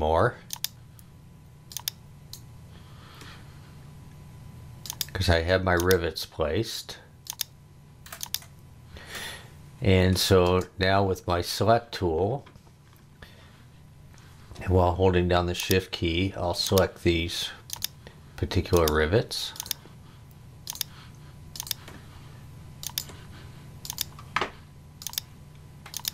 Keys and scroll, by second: 10.4 space.